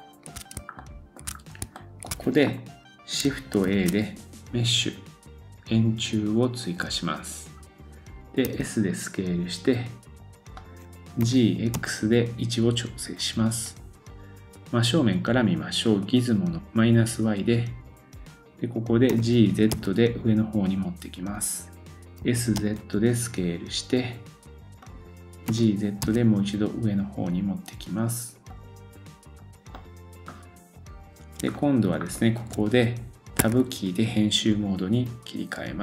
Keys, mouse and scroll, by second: 0.7 shift+scroll up 1, 0.8-1.2 shift+middle drag, 1.3 scroll up 2, 1.7 shift+middle click, 3.6 shift+a, 6.8-32.7 drag, 16.6 right click, 19.1 g, 29.3-29.8 scroll down 2, 29.8 middle click, 31.1 scroll up 2, 31.5 shift+middle click, 33.4 Tab, 33.4-35.8 drag.